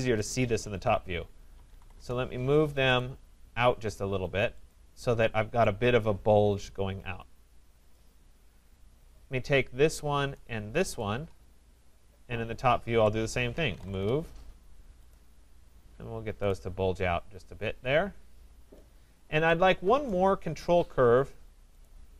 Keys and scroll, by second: 1.9 Return, 13.9 Return, 20.4 Escape.